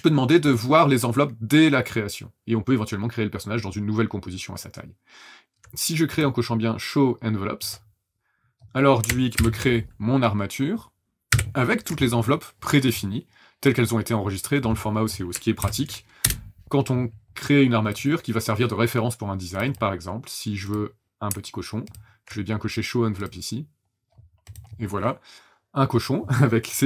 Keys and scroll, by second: 9.3 ctrl+shift+h, 11.3 ctrl+shift+h, 15.6 ctrl+n, 16.2 Return.